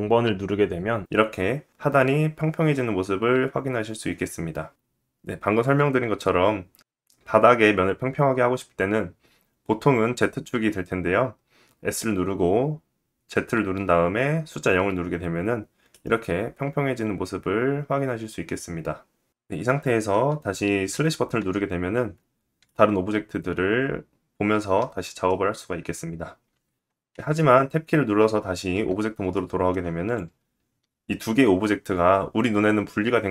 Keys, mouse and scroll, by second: 21.0 /, 26.4 click.